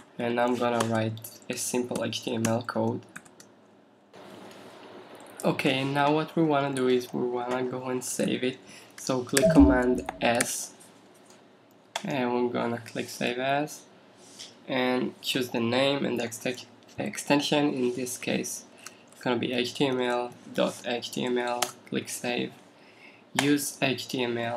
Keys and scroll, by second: 0.0 shift+,, 3.2 shift+..